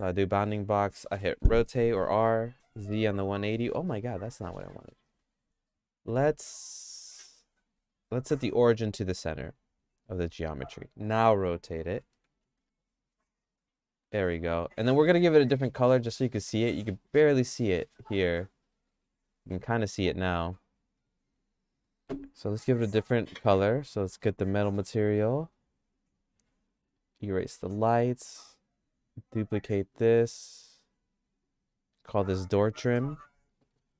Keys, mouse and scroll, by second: 1.5 r, 6.0 q, 7.6-10.0 right drag, 11.9 r, 14.4 Tab, 14.9 Tab, 16.0 click, 18.3 click, 18.9 middle click, 19.5 click, 21.3 click, 25.6 click, 27.2 click, 27.7 click, 31.3 click, 32.2 click, 32.5 click, 32.7-33.9 drag.